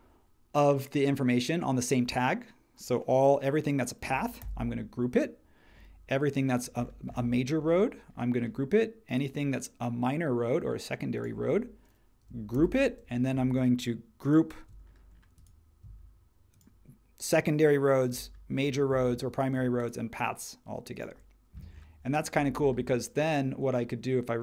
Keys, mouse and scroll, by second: 4.4 super+g, 12.5 super+g.